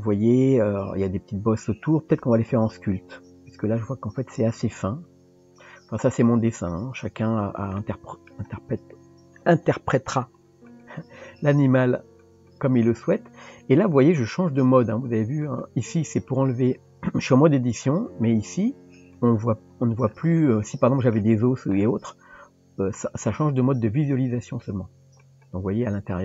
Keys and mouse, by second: 6.5 click, 7.8-8.3 middle drag, 8.9 Tab, 10.7 click, 12.2 click, 15.4 click, 16.5 click, 19.0 click, 20.4 middle click, 24.0 click, 25.2-26.2 drag.